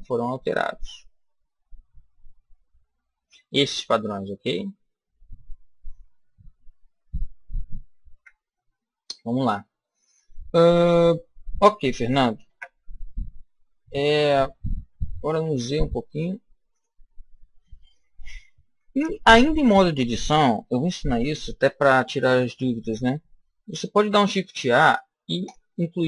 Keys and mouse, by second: 8.1 KP_1, 12.3 Tab, 14.8 s, 16.7 click, 23.9 shift+a.